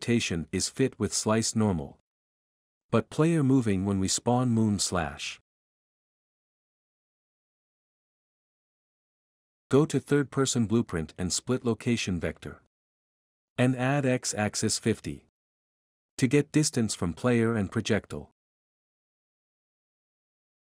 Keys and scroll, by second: 0.0-8.8 typing, 6.2 F11, 9.7 Escape, 9.8 F11, 16.4-17.3 typing, 18.7-19.4 typing, 19.5 Return.